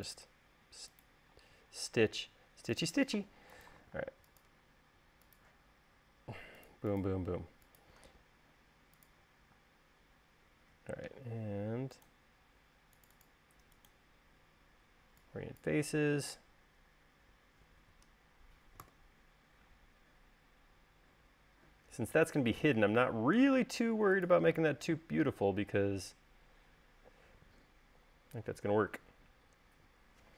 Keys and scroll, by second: 5.0 space, 10.5 space, 19.7 u.